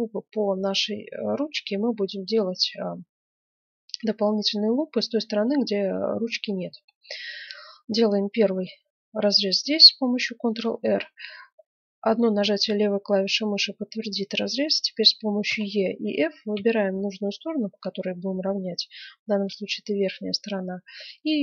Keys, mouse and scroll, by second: 0.8 middle click, 3.6-5.4 middle drag, 8.4 ctrl+r.